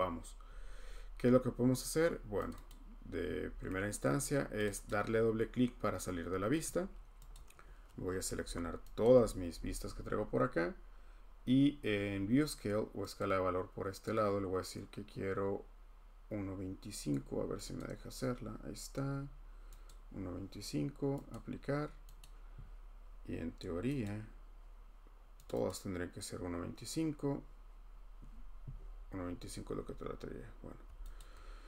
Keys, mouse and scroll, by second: 1.6-2.1 scroll, 2.5 click, 2.9 click, 3.4-4.1 scroll, 4.6 click, 4.8 click, 5.2-5.7 scroll, 7.3 click, 10.4 scroll, 13.2 click, 15.0 click, 17.8 click, 18.9-19.9 scroll, 19.9 click, 20.4 scroll, 21.3 click, 22.2 click, 24.0 click, 25.5 click, 25.6 click, 31.2 shift+click.